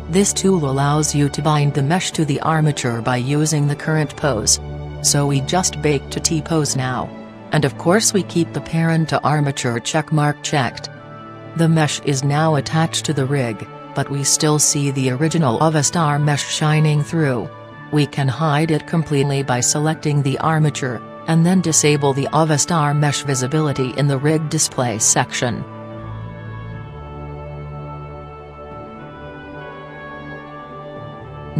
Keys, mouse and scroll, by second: 7.6-9.1 drag, 11.7-13.2 drag, 19.9-21.5 right drag, 22.0-23.6 drag, 24.9-30.3 drag, 30.1-31.5 middle drag.